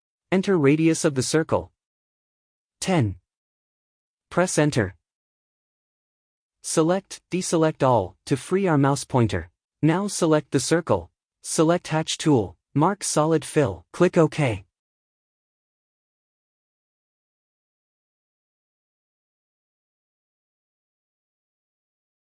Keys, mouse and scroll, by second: 9.4-9.9 drag.